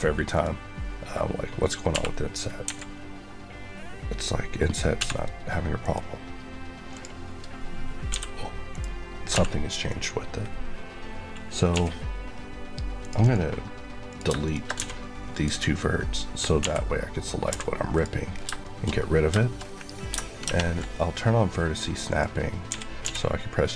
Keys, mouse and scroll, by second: 0.2 click, 1.8 b, 2.6 Escape, 4.8 v, 5.7 right click, 6.8 click, 8.6 right click, 9.2 v, 9.8 right click, 11.6 l, 12.1 scroll down 1, 12.9 click, 14.0 click, 14.3 shift+click, 14.7 x, 15.2 click, 16.5-17.4 typing, 17.8 click, 18.2 scroll down 2, 18.5 shift+middle click, 18.9-20.4 scroll up 5, 19.3 shift+middle click, 20.4 ctrl+shift+Tab, 22.0 click, 22.6-22.9 typing.